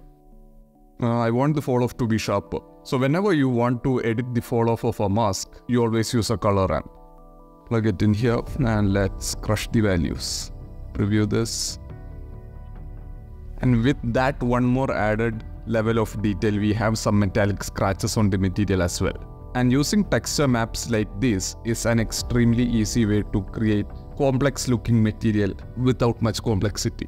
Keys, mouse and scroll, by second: 0.1 click, 0.5 click, 0.8 click, 1.8 click, 2.1 click, 2.4 shift+a, 6.1 BackSpace, 6.2 BackSpace, 8.0-8.5 drag, 9.3 click, 10.2 click, 11.6-12.4 drag, 12.5-13.0 middle drag, 13.0 shift+drag, 13.1 middle click, 19.4 click, 26.6 click.